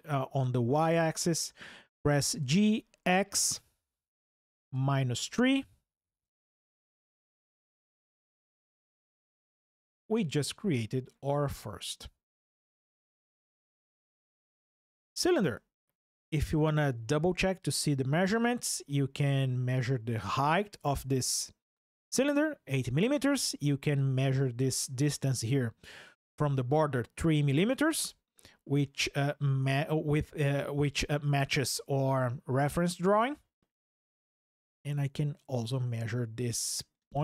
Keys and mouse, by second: 0.6 KP_Enter, 2.2 g, 2.8 x, 4.5 KP_Subtract, 5.0 KP_3, 6.0 KP_Enter, 7.2 click, 16.3 click, 18.4 ctrl+click, 23.7 ctrl+click.